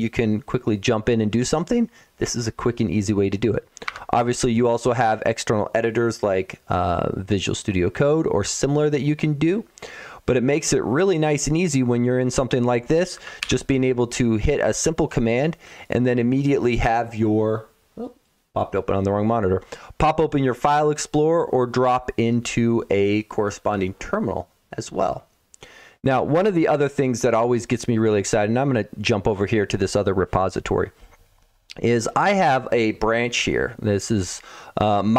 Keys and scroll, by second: 3.7 Escape, 13.3 alt+o.